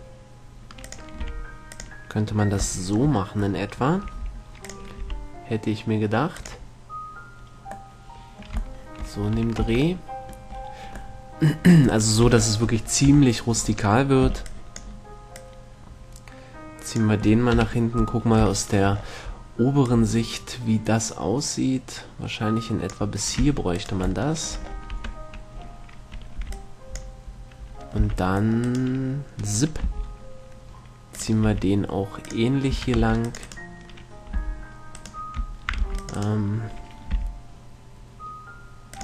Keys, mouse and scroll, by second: 1.1-3.9 drag, 1.5 r, 3.9-5.0 middle drag, 4.5 g, 5.0-8.7 drag, 5.3 r, 9.6 a, 9.9 Tab, 12.1-13.9 middle drag, 12.5 Tab, 13.3 KP_3, 14.5 b, 15.6-17.4 drag, 17.9 KP_7, 18.3-19.4 middle drag, 20.1-22.1 drag, 23.7 Tab, 24.0-26.5 right drag, 25.1 Tab, 26.7 middle click, 26.7 b, 28.2 c, 29.0-30.7 right drag, 30.1 g, 31.7 r, 32.6-34.6 drag, 33.0 a, 33.4 c, 33.7-35.2 right drag, 34.6 b, 36.1 c, 37.3 g.